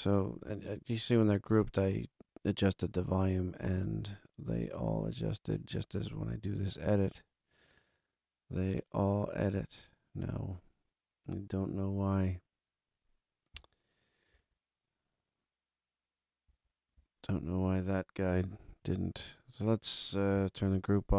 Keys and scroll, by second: 14.3 super+=, 16.4 super+=, 18.7 super+z, 20.5 super+=.